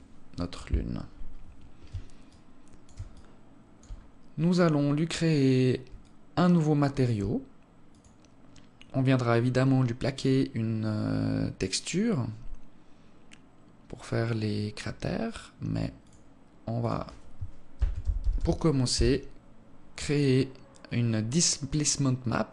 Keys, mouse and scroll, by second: 1.6 alt+shift+scroll up 1, 1.8 alt+shift+click, 2.6 alt+click, 5.6 alt+click, 7.5 click, 15.6 click, 20.4-20.9 scroll down 2, 20.9-22.0 scroll down 1, 22.0 scroll up 3, 22.2 click.